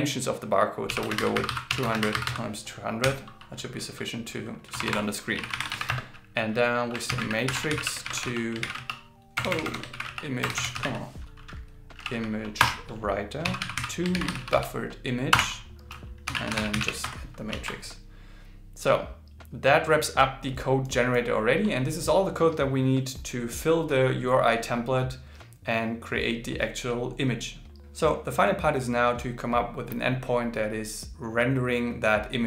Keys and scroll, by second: 7.1 shift+m, 8.0 shift+t, 9.6 shift+i, 10.0 shift+o, 14.2 shift+b, 17.8 super+s.